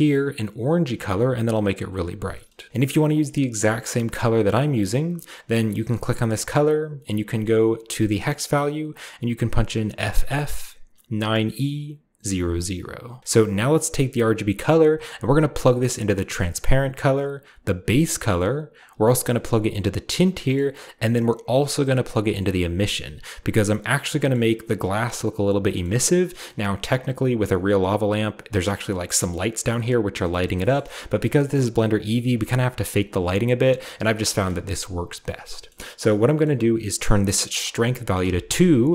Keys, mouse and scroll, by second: 2.7 ctrl+v, 2.7-4.1 ctrl+middle drag, 2.7-4.1 ctrl+scroll up 1, 2.7 c, 4.2 click, 5.4 middle click, 5.4-6.3 scroll down 1, 5.7-6.5 middle drag, 6.3 scroll down 1, 7.1 middle drag, 7.1 scroll down 1, 7.3 click, 7.6-8.2 drag, 8.3-9.9 drag, 13.2-14.5 scroll down 1, 13.5 click, 14.5-16.0 drag, 16.8-17.8 drag, 18.7-20.1 drag, 21.7-23.6 drag, 25.9-26.8 scroll up 1, 26.8-27.4 scroll up 1, 29.0-30.2 shift+middle drag, 30.4 shift+middle drag, 30.7 shift+middle drag, 30.8-31.9 scroll down 1, 31.9-33.4 scroll down 1, 32.1-34.2 middle drag, 34.4-35.5 shift+middle drag, 35.7 middle click, 36.4-37.5 middle drag, 37.5 click, 38.2 2, 38.4 click.